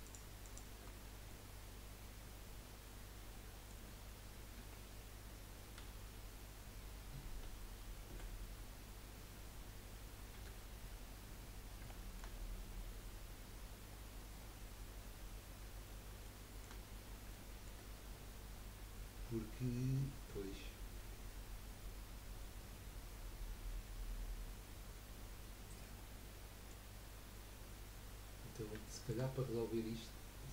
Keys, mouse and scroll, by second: 0.0 alt+shift+click, 0.4 alt+shift+click, 1.3-4.4 middle drag, 4.6 KP_1, 5.8 KP_3, 7.4 z, 10.4 1, 11.4-11.8 scroll up 3, 11.8 shift+middle click, 12.3-13.0 scroll up 8, 13.8-14.3 scroll down 4, 14.6 scroll up 1, 15.9 scroll up 3, 16.4-18.6 shift+middle drag, 18.6-19.1 scroll down 1, 19.1-19.4 scroll down 5, 20.2 scroll up 1, 25.2 scroll down 4, 26.0-28.5 middle drag, 28.5-28.9 scroll down 2, 28.9-30.4 shift+middle drag, 30.4 z.